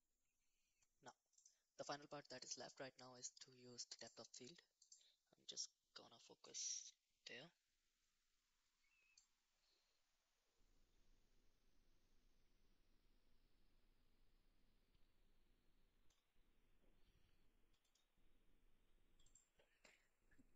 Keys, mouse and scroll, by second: 1.4-3.3 drag, 3.9 click, 4.8 click, 9.2-16.1 drag, 17.9 click, 19.3-20.5 drag.